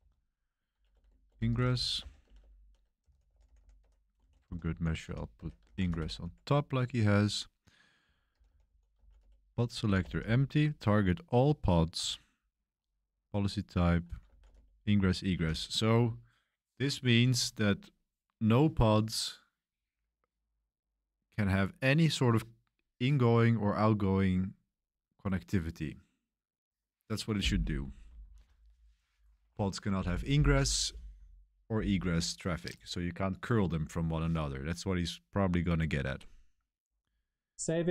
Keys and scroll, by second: 0.0-6.6 typing, 5.3 Escape, 7.7-10.3 typing, 14.0-15.4 typing.